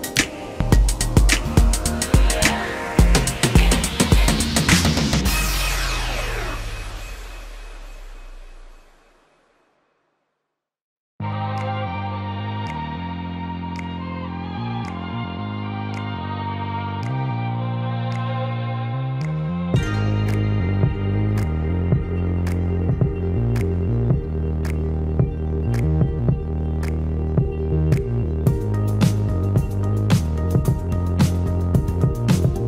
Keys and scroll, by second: 5.9 space, 6.1 Escape, 13.4 Escape, 20.1 space, 22.4 p, 25.1 space, 28.0 m.